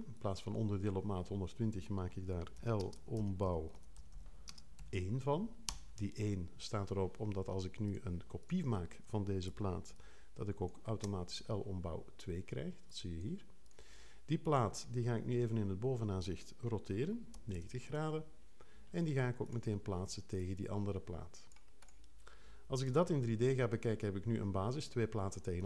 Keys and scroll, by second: 2.4-4.7 typing, 5.7 Page_Up, 15.4 5, 17.5 super+l, 22.8 l.